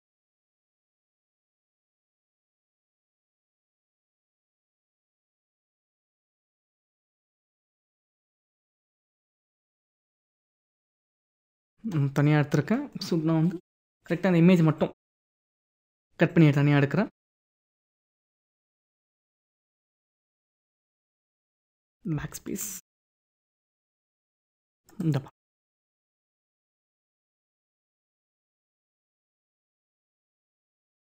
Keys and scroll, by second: 10.0 ctrl+-.